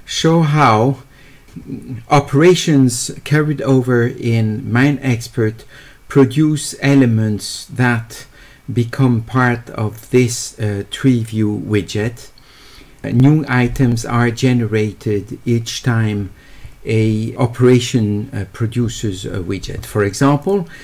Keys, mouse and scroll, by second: 20.4 click.